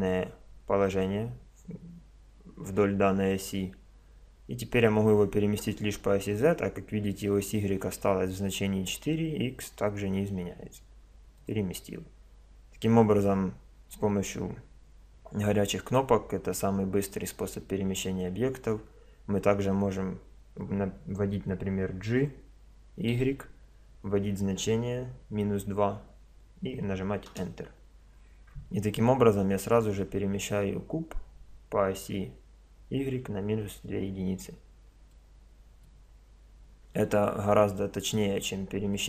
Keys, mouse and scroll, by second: 22.1 g, 35.2-36.9 middle drag, 36.9-38.6 drag, 38.9-39.0 drag.